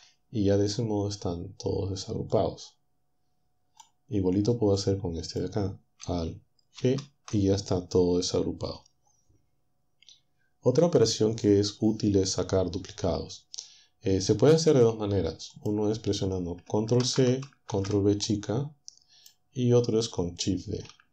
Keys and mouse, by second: 2.4-4.2 drag, 4.8 click, 6.8 alt+g, 15.6 click, 17.0 ctrl+c, 17.7 ctrl+v, 18.4-19.4 ctrl+drag.